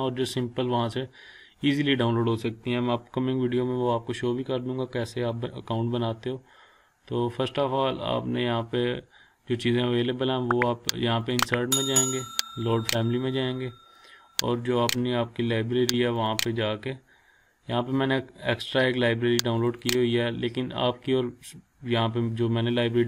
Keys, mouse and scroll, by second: 6.1-6.6 scroll up 1, 11.2 click, 19.6 click.